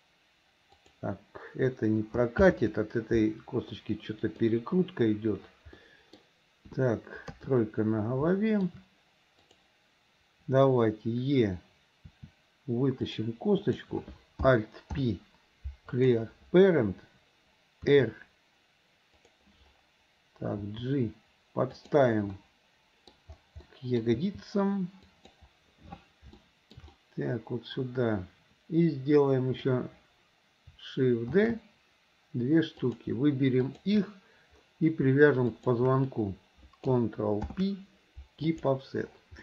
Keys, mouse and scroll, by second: 2.5 ctrl+z, 3.8 middle click, 5.8 middle click, 7.1 KP_1, 7.3 KP_3, 8.4 shift+middle click, 12.1 e, 13.7 click, 14.9 alt+p, 19.1 r, 22.0 g, 22.4 middle click, 23.7 middle click, 24.6 g, 26.4 shift+middle click, 26.9-29.8 middle drag, 26.9 scroll up 1, 29.7 scroll down 1, 31.4 shift+d, 33.6 click, 35.5 shift+click, 37.4 ctrl+p.